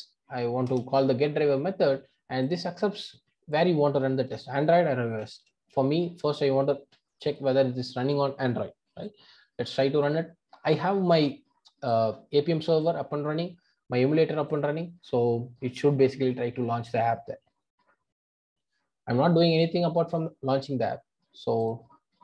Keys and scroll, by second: 10.1 ctrl+r.